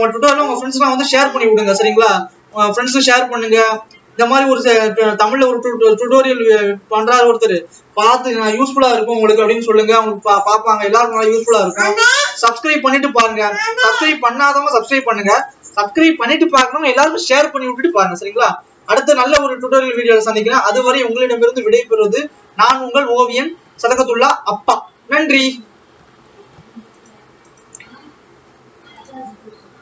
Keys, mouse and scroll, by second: 24.0-24.7 scroll up 2.